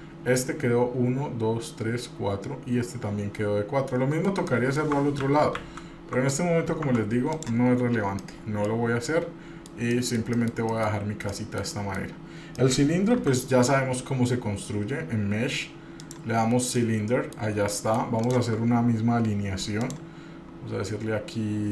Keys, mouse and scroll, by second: 4.7 middle click, 5.5 ctrl+z, 5.8 ctrl+z, 7.1 Tab, 7.5 click, 8.1 scroll down 1, 8.4 middle click, 9.3 middle click, 10.1-11.2 middle drag, 11.2 scroll down 1, 11.5 middle click, 11.9 middle click, 12.7 middle click, 13.4 shift+a, 16.6 scroll down 2, 17.0 middle click, 17.9 shift+middle click, 18.4 shift+click, 20.0-21.7 drag.